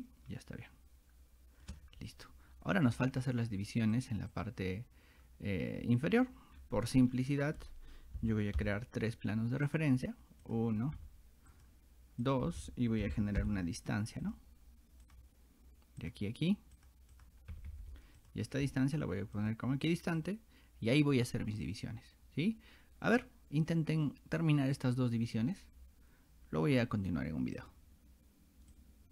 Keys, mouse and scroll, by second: 2.7 scroll up 2, 4.0 click, 4.3 click, 6.6 middle click, 6.6 scroll up 2, 7.1 middle click, 8.2 r, 9.7 click, 10.5 click, 11.5 click, 12.3 click, 14.2 click, 15.1 click, 16.0 click, 16.8 click, 17.2 click, 18.2 click, 19.4 click, 20.2 click, 27.6 click, 28.7 click.